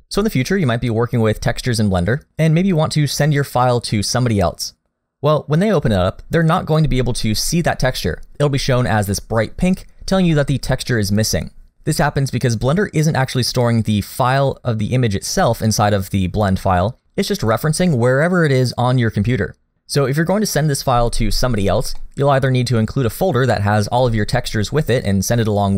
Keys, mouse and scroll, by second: 8.3 scroll up 1, 22.0 middle click.